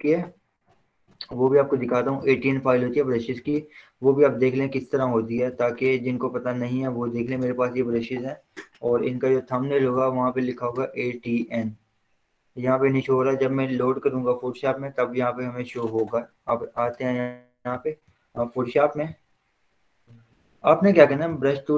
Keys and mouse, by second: 0.1 click, 3.0 click, 10.0 click, 18.9 click, 21.4 b.